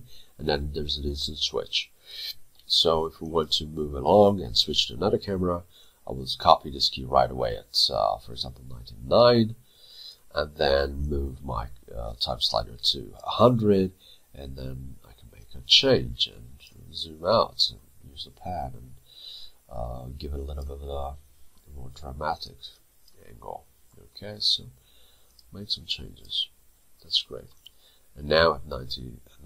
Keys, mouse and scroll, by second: 5.8 shift+click, 17.2 middle click, 22.7 double click, 23.4 middle click, 25.8 double click, 26.5 middle click, 27.7 right click.